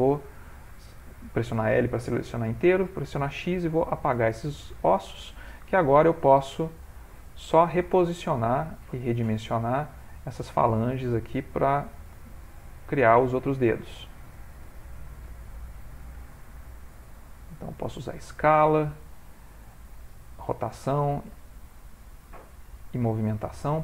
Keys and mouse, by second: 2.6 x, 4.7 click, 5.6 click, 6.4 g, 7.9 s, 9.2 r, 10.0 g, 11.3 click, 12.4 shift+click, 12.9 click, 14.0 shift+click, 14.5 g, 15.3 r, 16.0 g, 16.9 s, 20.0 r, 21.4 s, 22.8 click, 23.6 shift+click.